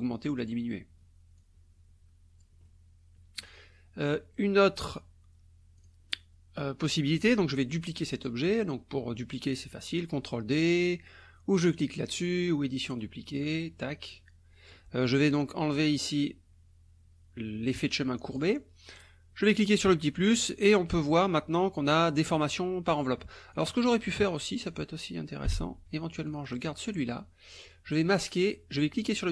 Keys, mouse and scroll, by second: 1.4-2.6 drag, 4.1 click, 5.8 click, 12.2 click, 13.5 click, 14.0-14.9 drag, 18.4 click, 19.5 click, 23.5 click, 24.2 click, 25.5 Delete, 26.3 click, 26.6 click, 28.2 click, 29.0 click.